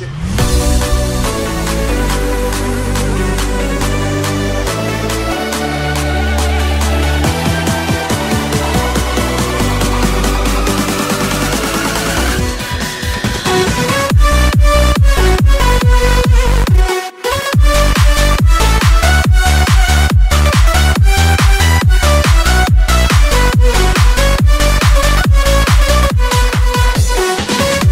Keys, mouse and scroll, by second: 0.8 z, 1.7 s, 2.9 alt+shift+click, 3.7 e, 6.3-7.6 drag, 6.3 s, 8.7 ctrl+r, 9.7 s, 11.4 g, 12.1 s, 12.3-14.3 drag, 12.9 ctrl+r, 13.4 s, 14.1 a, 14.2 Tab, 14.4 alt+shift+click, 14.9-18.3 alt+middle drag, 15.1 Tab, 16.6 e, 18.3 s, 20.1 ctrl+r, 20.5 s, 20.8 click, 21.2 a, 21.8 e, 23.6 ctrl+KP_Add, 24.1 s, 25.2 a, 25.8-27.9 alt+middle drag, 26.5-27.9 typing.